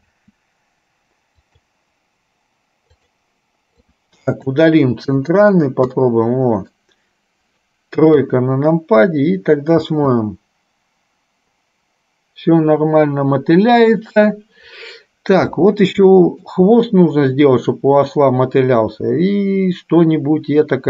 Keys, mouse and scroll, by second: 0.2 space, 2.9 click, 4.0 click, 5.4 Delete, 6.2 middle click, 8.3 KP_3, 9.9 space, 16.5 shift+middle click.